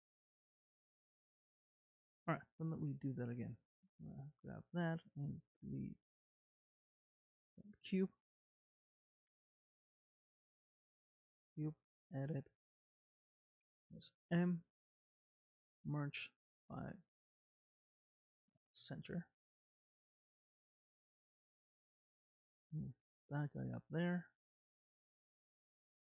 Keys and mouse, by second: 1.8 click, 2.6 click, 4.8 x, 9.2 shift+a, 11.7 Tab, 14.3 m, 20.6 Tab, 21.2 g, 24.0 middle click.